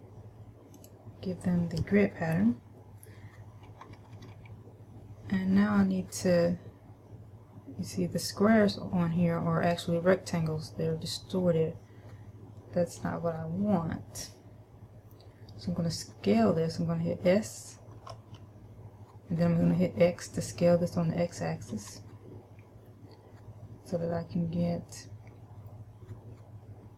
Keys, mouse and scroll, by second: 2.6-4.1 scroll down 2, 4.1 KP_Subtract, 4.3 KP_Subtract, 4.6 KP_Subtract, 18.2 s.